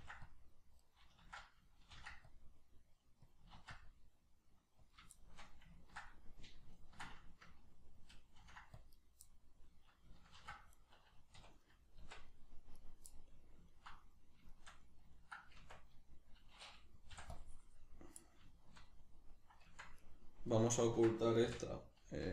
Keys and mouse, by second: 0.9 right click, 1.2 ctrl+z, 1.9 ctrl+r, 3.3 click, 3.5 ctrl+r, 4.9 click, 5.1-9.1 shift+middle drag, 8.4 ctrl+r, 9.1 right click, 9.3-10.9 middle drag, 10.3 ctrl+r, 10.9 right click, 11.3 \, 11.6-12.8 middle drag, 12.0 Tab, 12.8 right click, 13.1-17.3 middle drag, 15.6 Tab, 17.3 click, 18.2-20.0 middle drag, 19.7 Tab, 20.0 right click, 20.6-22.3 ctrl+middle drag.